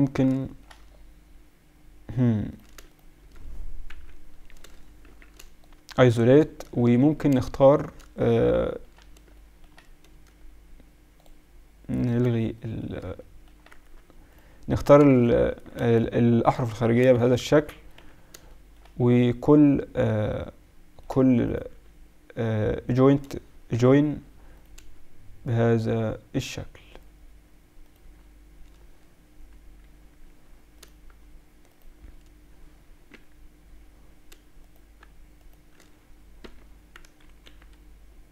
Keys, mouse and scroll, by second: 0.4 middle click, 2.5-4.7 right drag, 3.9 KP_Divide, 5.0 shift+b, 6.3 middle click, 11.1-13.8 middle drag, 14.9 a, 15.7 a, 17.0 a, 17.9 f, 21.4-26.8 right drag, 24.5 j, 27.8-33.5 right drag, 33.1 j, 34.6-37.2 right drag, 36.4 j, 37.2 ctrl+r.